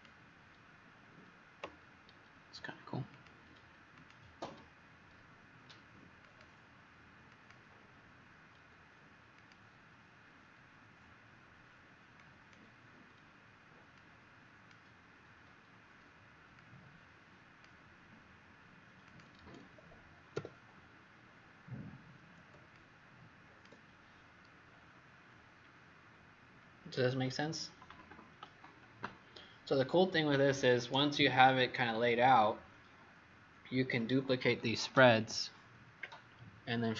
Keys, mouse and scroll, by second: 20.3 w, 22.6 click.